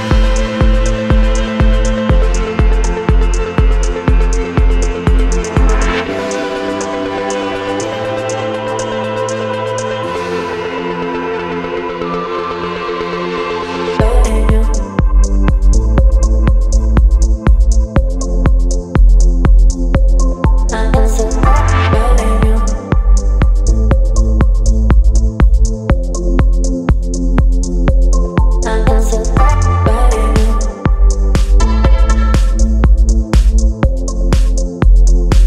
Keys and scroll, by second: 3.5 Left, 18.9 space, 21.2 t.